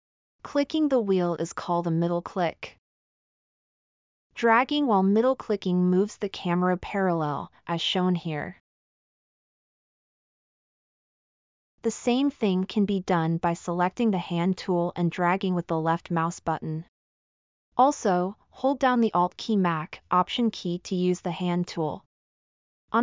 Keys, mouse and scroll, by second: 0.2 middle click, 1.9-5.6 middle drag, 6.4-7.3 middle drag, 7.8-8.5 middle drag, 9.0-9.9 middle drag, 10.2-11.1 middle drag.